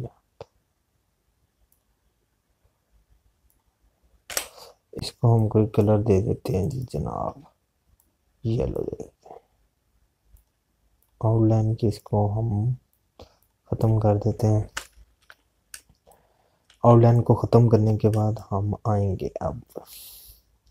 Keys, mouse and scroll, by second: 5.1 Escape, 6.2 click, 16.6 space, 16.9 click, 17.2 space, 17.7 z, 18.1 click, 19.1 space, 19.1 click, 19.7 space.